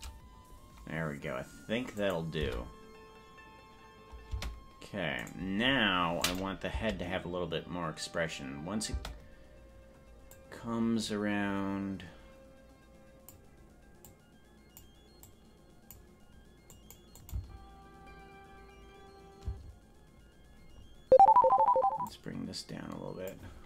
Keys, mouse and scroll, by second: 2.0 click, 2.5 space, 4.5 space, 5.5 right click, 6.3 click, 6.7 space, 9.1 space, 10.3-13.4 drag, 14.1 click, 15.2 click, 16.8 click, 17.2 click, 17.5 space, 19.5 space, 22.0-23.4 drag.